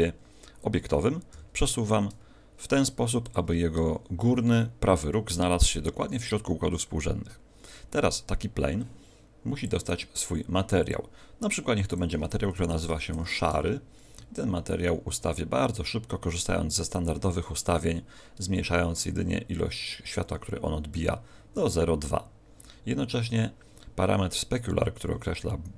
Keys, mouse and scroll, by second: 1.3 g, 3.3 ctrl+click, 9.5 click, 17.5 click.